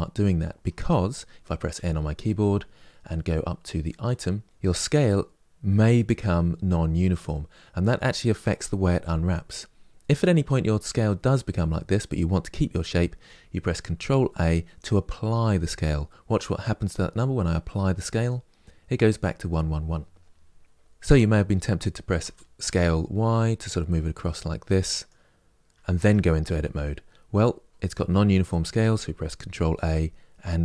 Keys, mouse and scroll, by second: 1.4 n, 22.0 s, 25.7 Tab, 26.3 Tab.